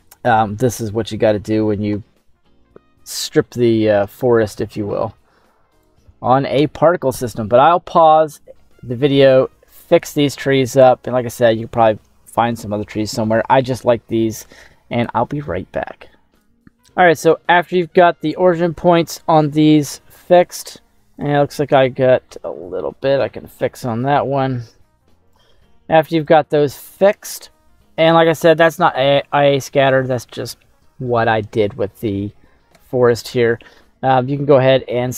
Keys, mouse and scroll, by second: 0.3 middle click, 1.0-1.9 scroll down 6, 2.0 middle click, 3.1-3.5 scroll down 2, 3.4 middle click, 4.1 shift+middle click, 15.0 middle click, 16.3 shift+middle click, 16.3 scroll up 2, 17.2 right click, 18.4 middle click, 20.5 click, 22.4 g, 24.1 x, 25.3 click, 26.2-27.2 drag, 34.6 s.